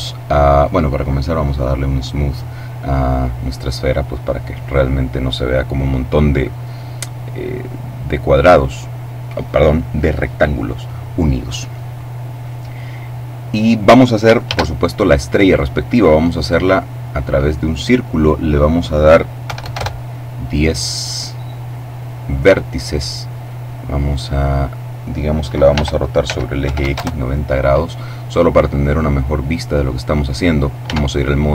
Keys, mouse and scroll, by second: 1.2 click, 14.4 shift+a, 16.5 click, 18.3 click, 19.4 1, 19.7 Return, 21.9-23.3 drag, 23.4-24.6 drag, 25.6 r, 26.1 x, 26.5 9, 26.7 0, 26.9 Return, 28.7-30.1 drag, 30.7 Tab.